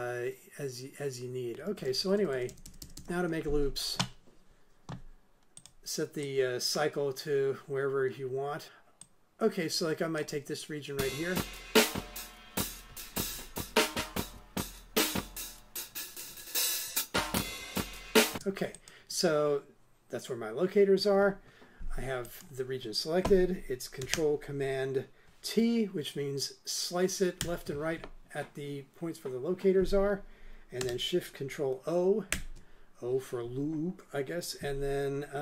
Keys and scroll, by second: 1.7 super+Left, 11.0 space, 18.3 space, 27.4 ctrl+super+t, 32.3 ctrl+shift+o.